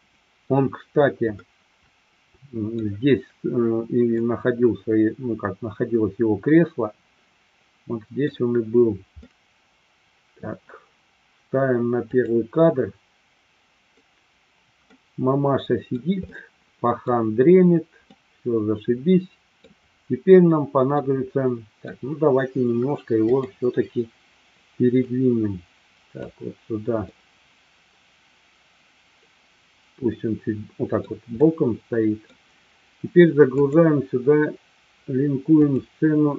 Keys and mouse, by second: 1.3-2.7 middle drag, 4.1-8.3 middle drag, 9.2-10.5 middle drag, 13.9-15.6 drag, 15.6-16.0 middle drag, 16.2-17.1 middle drag, 18.1-19.6 middle drag, 21.1-21.9 middle drag, 25.0-26.2 drag, 27.1-31.0 middle drag, 31.4 middle click, 33.5-36.0 drag.